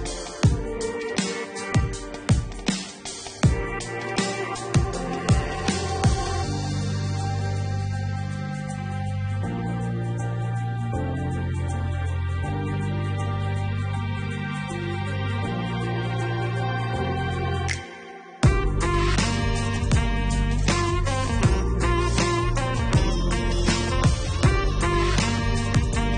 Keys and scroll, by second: 17.1-18.6 typing, 19.5 Return.